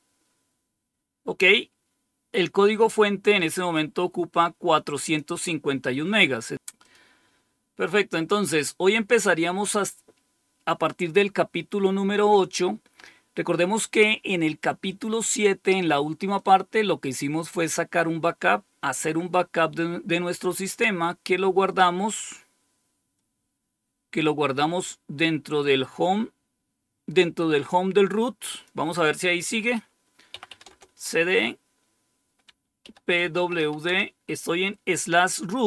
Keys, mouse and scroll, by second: 3.6-5.1 drag, 6.7 click, 7.5-9.1 scroll down 4, 9.1-16.3 scroll down 1, 16.3 click, 18.3-21.4 scroll down 5, 21.4-25.8 scroll down 1, 25.8 scroll down 1, 28.4 click, 30.2-30.9 typing, 32.2-34.0 typing.